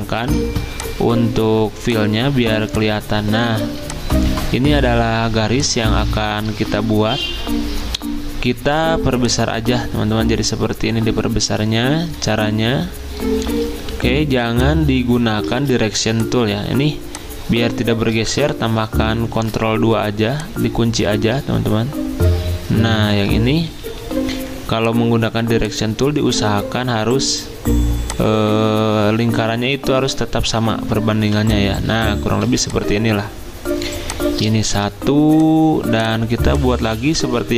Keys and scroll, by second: 0.4 ctrl+z, 3.5 z, 7.1 v, 14.5 v, 15.5 ctrl+z, 19.3 ctrl+2, 23.8 a, 31.2 v, 32.4 z, 34.0 v, 37.2 ctrl+z.